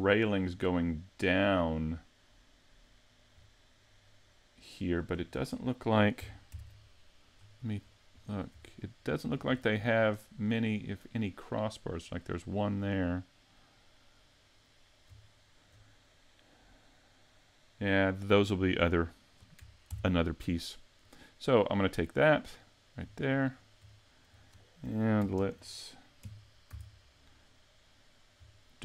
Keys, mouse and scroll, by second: 0.7 middle click, 1.5 middle click, 3.4-4.7 scroll down 2, 4.8 scroll up 3, 5.3 shift+middle click, 19.9 ctrl+Up, 19.9-20.7 scroll down 2, 20.7-21.1 scroll down 2, 21.1 middle click, 21.9 right click, 23.1 right click, 24.0 shift+middle click, 24.6 middle click, 25.3 ctrl+KP_3, 26.2 KP_5, 26.7 z, 28.6 shift+middle click.